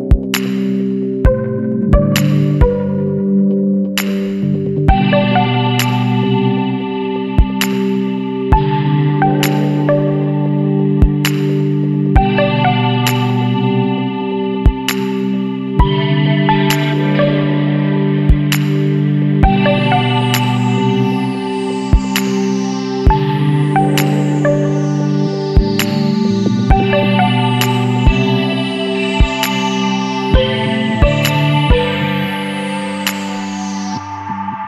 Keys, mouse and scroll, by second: 3.2 click, 5.2 click, 6.0 KP_Subtract, 6.4 KP_2, 6.8 KP_Decimal, 7.0 KP_2, 7.3 KP_5, 7.8 KP_Enter, 9.6-9.9 scroll up 1, 10.7-12.0 scroll up 3, 13.6 click, 15.9 click, 18.2 click, 20.4 click, 21.9 Escape, 22.7 click, 24.0 click, 25.0 KP_1, 25.2 KP_0, 25.6 KP_Enter, 27.2 click, 28.2 click, 29.1 KP_1, 29.4 KP_8, 29.6 KP_0, 30.0 KP_Enter, 33.5 click.